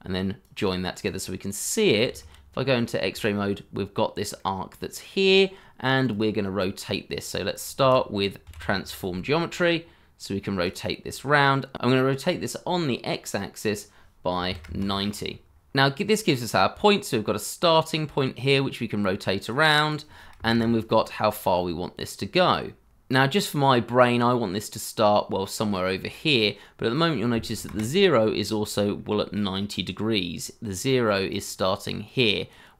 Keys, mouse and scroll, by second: 2.1 shift+z, 2.5-3.1 scroll up 1, 3.2 shift+middle click, 4.3 middle click, 7.8-9.8 typing, 10.6-11.2 scroll down 1, 11.2 shift+middle click, 11.5 scroll up 1, 14.3 9, 14.4 0, 14.6 Return, 20.2 0, 21.9 Return, 27.5 0, 28.1 Return, 28.9-29.5 scroll up 1.